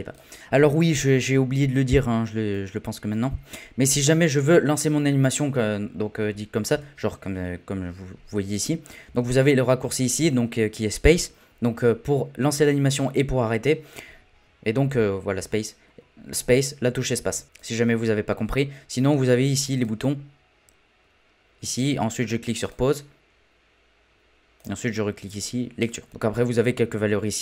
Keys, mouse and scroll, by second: 4.3 scroll up 2, 4.3 scroll down 1, 4.4-4.8 scroll up 1, 4.8-5.3 scroll down 1, 5.3-6.7 scroll down 4, 6.7 space, 9.0 space, 15.4 space, 17.3 space, 17.4-26.1 drag.